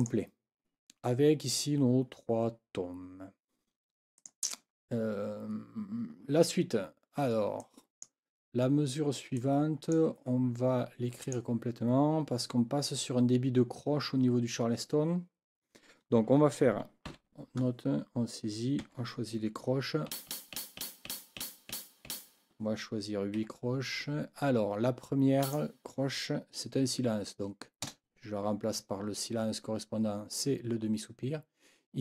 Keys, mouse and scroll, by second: 0.0 click, 4.2 click, 7.6 click, 9.3 click, 11.2 click, 17.1 n, 18.8 KP_4, 20.1 g, 23.4 Escape, 25.4 click, 27.9 KP_0.